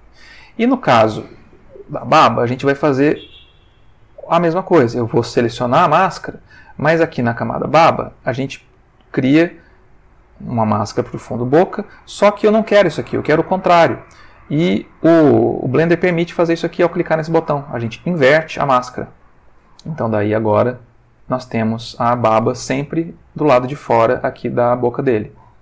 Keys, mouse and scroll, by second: 5.4 click, 6.5 click, 8.8 click, 11.2 click, 15.9 click, 18.6 click, 19.1 click, 20.1-22.1 ctrl+middle drag.